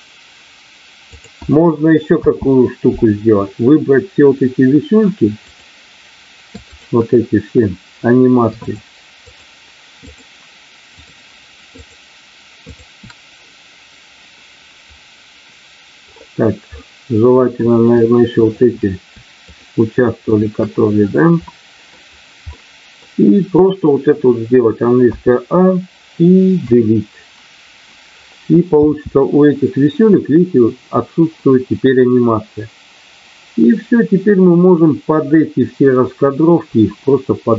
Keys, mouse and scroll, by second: 1.0 click, 2.1 space, 5.4 click, 6.6 shift+click, 9.3 shift+click, 10.0 shift+click, 12.6 shift+click, 16.8 middle click, 18.3 shift+click, 19.4 shift+click, 20.2 shift+click, 21.5 middle click, 22.5 middle click, 26.5 Delete, 28.7 space.